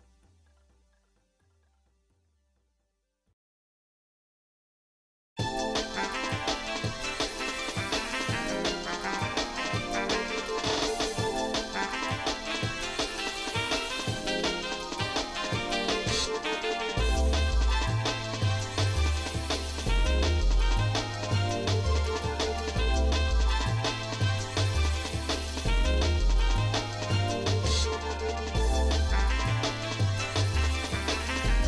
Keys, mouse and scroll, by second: 2.1 shift+middle click, 3.3 shift+middle click, 5.5 Tab, 6.3 click, 6.9 click, 7.9 click, 9.2 shift+click, 10.2 click, 10.9 click, 12.1 shift+click, 12.7 Tab, 13.6 shift+middle click, 14.7 click, 16.4 l, 17.4 l, 20.4 click, 21.6 ctrl+z, 23.9 alt+shift+click, 25.5 ctrl+z, 26.5 alt+shift+click, 28.6 shift+middle click, 29.4 scroll up 2, 30.5 alt+shift+click.